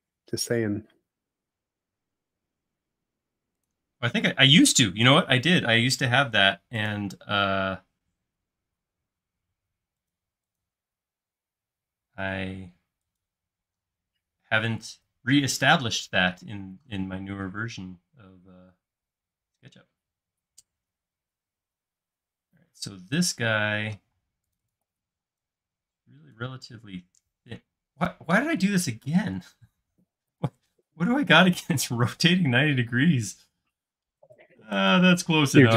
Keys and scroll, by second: 4.3 q, 6.0 Right, 8.5 Escape, 9.4 Left, 13.7 space, 24.2-25.6 typing, 29.5 super+z, 30.1 space, 31.9 q, 33.5 Right, 34.3 Left.